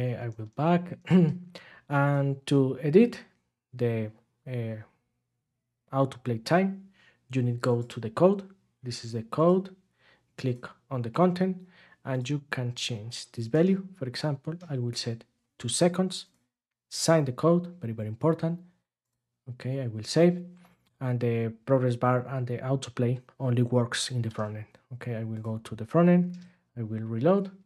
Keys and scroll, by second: 13.5 BackSpace, 14.1 BackSpace, 24.2 ctrl+Tab, 26.3 super+r.